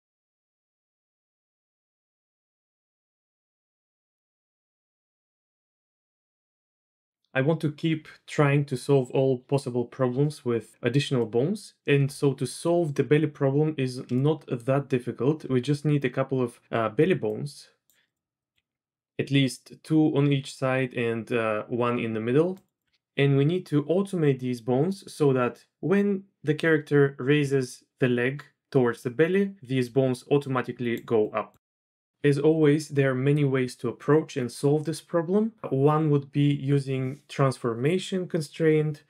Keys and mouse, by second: 0.4-1.9 drag, 2.1-4.1 drag, 4.9 click, 5.6-6.5 drag, 6.6 click, 11.2 click, 14.2-14.6 drag, 15.4 d, 17.0-18.5 d, 17.2-18.5 drag, 22.2-22.9 d, 22.5 click, 22.8 drag, 29.8 d, 30.3 d, 30.4-31.7 drag, 30.4-31.7 d.